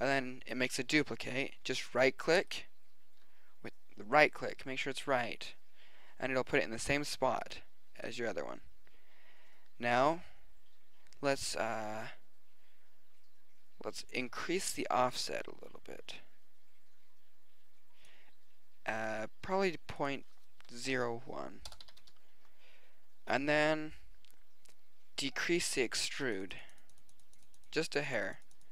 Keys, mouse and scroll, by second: 15.0-16.7 middle drag, 19.9-21.9 middle drag, 25.4-27.4 middle drag.